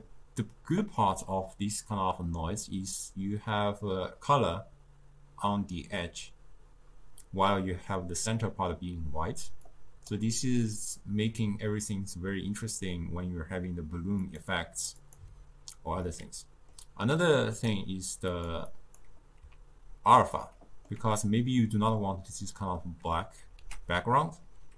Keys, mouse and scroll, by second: 0.7 click, 9.7-12.7 drag, 14.2 click, 15.0 click, 16.1-17.2 middle drag, 17.2 click, 18.3 click, 18.7-20.5 drag, 20.5-23.6 middle drag, 23.6 ctrl+a.